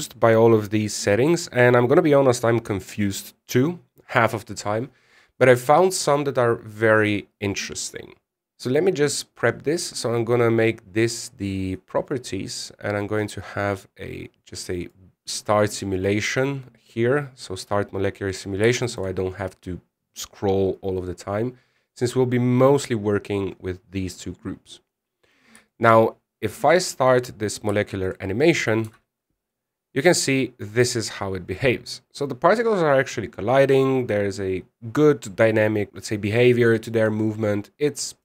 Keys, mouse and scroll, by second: 9.6 click, 13.6 click, 14.1-15.6 scroll down 21, 15.6 click, 15.8-16.7 scroll down 4, 16.7 click, 17.1-17.7 scroll down 2, 19.5 shift+middle click, 20.1 scroll up 5, 20.5 scroll down 7, 20.6-21.2 scroll up 3, 21.2-23.0 scroll down 5, 23.5 scroll down 2, 25.6 middle click, 26.4 shift+middle click, 26.7-27.8 scroll down 1, 27.8 click, 28.6 shift+middle click, 29.6 z, 30.0 scroll up 2, 31.9-32.2 scroll down 2, 38.0 middle click.